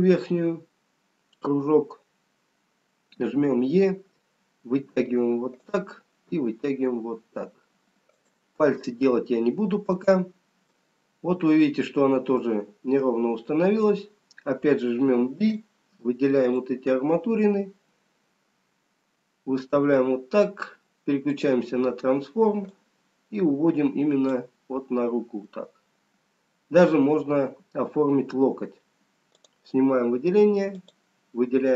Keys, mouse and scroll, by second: 0.2-1.2 scroll down 3, 5.4 e, 8.9 middle click, 10.4-11.7 scroll down 3, 11.7 middle click, 15.9 b, 18.5 middle click, 21.3 click, 22.7 click, 25.5 middle click, 27.1-27.9 scroll up 2, 28.6 scroll down 1, 29.8 click, 30.5 click.